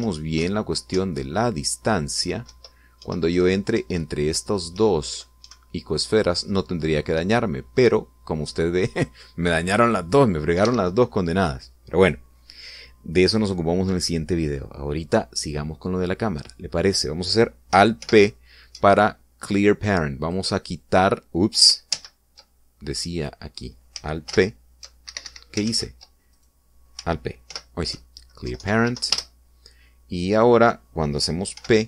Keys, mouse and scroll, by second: 0.7 Left, 1.1 Right, 1.7 Up, 3.2 Left, 3.7 Right, 4.5 Up, 5.5 Left, 5.9 Right, 7.9 Up, 9.2 Down, 11.4 Escape, 18.8 alt+p, 21.0 click, 22.7 ctrl+z, 23.9 right click, 25.0 alt+p, 25.8 alt+Escape, 26.4 ctrl+alt+z, 28.3 alt+p, 29.2 Down, 29.6 Up, 29.9 Return.